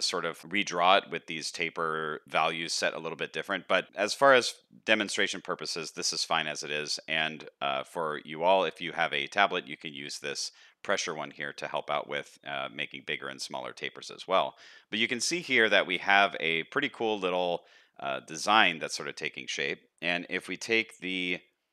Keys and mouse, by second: 14.0 n, 14.5 middle click, 15.2 shift+middle click, 15.9 middle click, 16.7 shift+middle click, 17.0-17.5 middle drag, 18.1 shift+middle click.